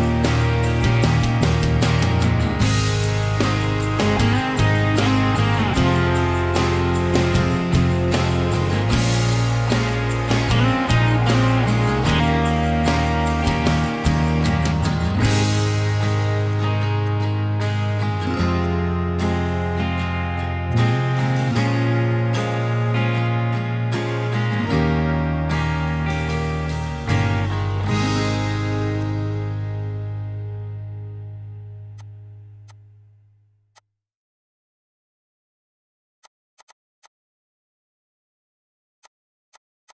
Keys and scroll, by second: 2.1 Escape, 8.5 ctrl+h, 9.0 ctrl+h, 9.5 ctrl+h, 10.0 ctrl+h, 10.3 ctrl+h, 14.1 Escape.